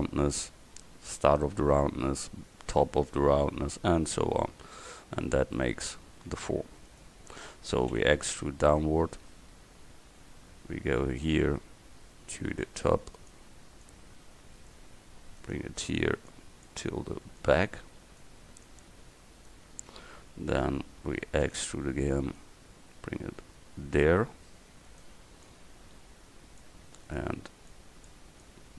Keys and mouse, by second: 5.6 middle click, 6.9 right click, 8.0 e, 13.2 right click, 15.3 click, 17.4-21.5 drag, 21.5 e, 25.5-28.7 right drag.